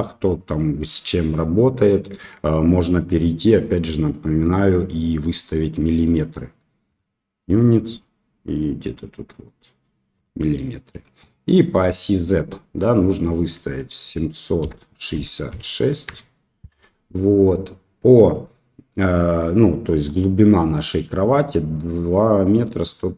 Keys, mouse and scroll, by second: 3.5 click, 6.9 click, 8.9-10.2 drag, 12.9-16.7 drag.